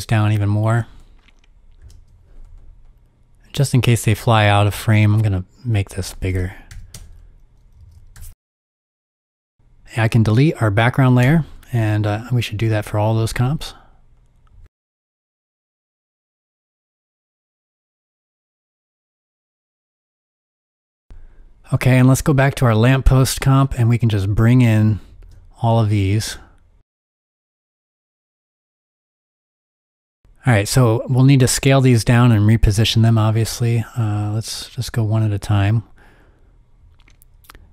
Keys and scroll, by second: 0.1 typing, 0.2 Return, 1.8 super+k, 3.1 super+k, 6.3-8.8 typing, 14.4 BackSpace, 16.0 BackSpace, 17.3 BackSpace, 20.8 BackSpace.